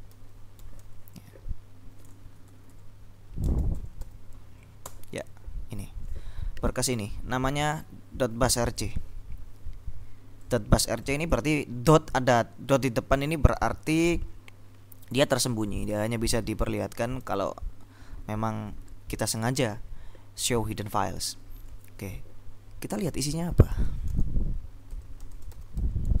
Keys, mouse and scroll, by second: 0.0-1.5 typing, 2.2 ctrl+Left, 3.6 space, 3.8 -, 4.1 l, 4.9 Return, 8.6 click, 10.5-11.9 drag, 16.9 click, 23.4-26.2 typing.